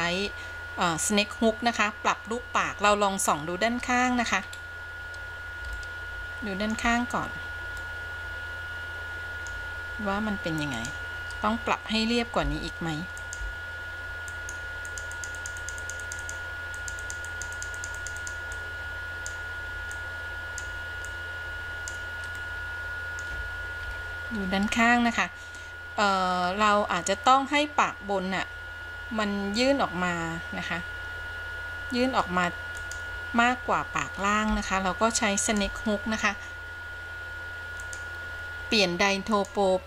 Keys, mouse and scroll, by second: 3.0 KP_3, 4.5-5.8 scroll up 2, 5.9-7.0 shift+middle drag, 7.1-8.0 scroll up 2, 8.0-9.9 middle drag, 10.9 click, 12.6 f, 13.4 f, 15.1 click, 15.4 click, 15.6 click, 15.9 click, 16.1 click, 16.3 click, 17.0 click, 17.5 click, 18.2 click, 18.4 click, 18.8 click, 20.1-21.2 drag, 21.3 click, 22.7 middle click, 24.1 KP_3, 25.7-26.8 scroll down 1, 26.8-27.3 scroll up 1, 32.9 click, 34.7 f, 35.6 f, 35.8 f, 39.4-39.8 drag.